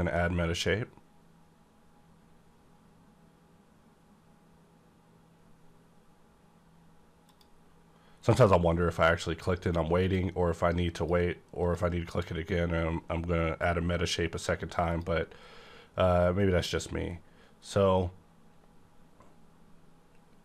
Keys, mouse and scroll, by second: 7.3 click, 8.2 scroll up 1, 8.7 scroll down 1, 10.0 click, 10.9 click, 14.9 click, 16.8 scroll down 1.